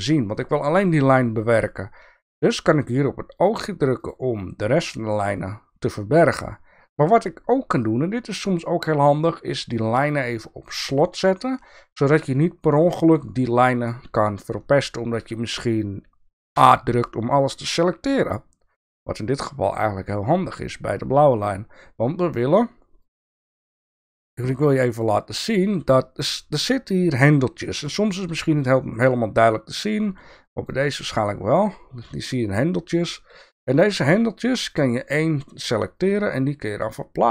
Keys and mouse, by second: 3.3 click, 4.0 click, 9.9 click, 10.8 click, 16.5 a, 23.0 click, 23.7 click, 24.6 click, 27.7 click, 28.2 drag, 30.4 drag, 32.9 click, 33.6 drag, 34.7 click, 35.9-37.3 drag.